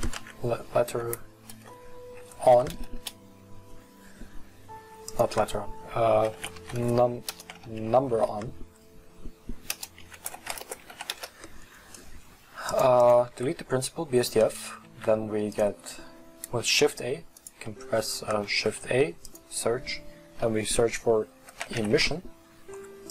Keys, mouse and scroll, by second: 11.1-12.2 drag, 13.0 click, 13.5 x.